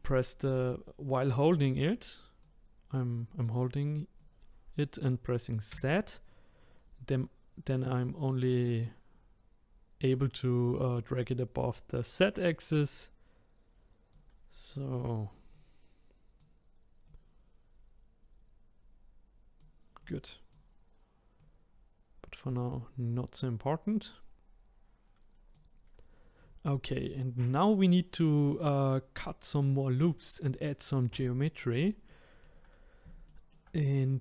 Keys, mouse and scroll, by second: 4.2 click, 15.5 click, 17.0 click, 20.0 click, 21.4 click, 32.2 shift+middle click, 33.4-34.2 middle drag.